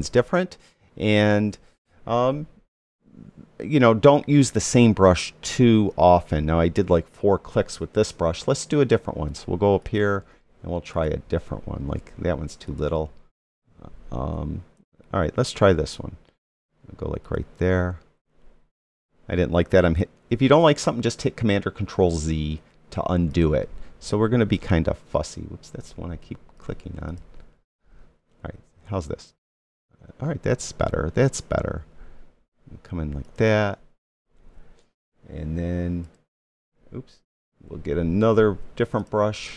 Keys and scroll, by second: 20.1 super+z.